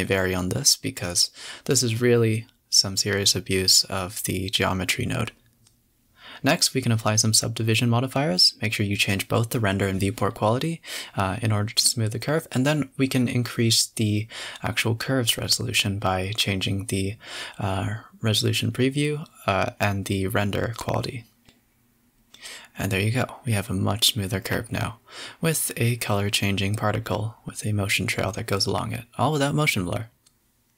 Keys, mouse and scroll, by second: 1.3 z, 1.7 space, 2.2 click, 3.5-5.3 typing, 4.5 scroll up 4, 7.2-10.6 drag, 14.0-16.0 drag, 16.0-17.3 scroll down 11, 16.5 space, 17.3 KP_0, 17.6 a, 17.7 a, 17.8 scroll down 6, 19.5 F12, 20.1 space, 22.3 click, 22.9 a, 23.0 a, 24.9 z, 30.1 click.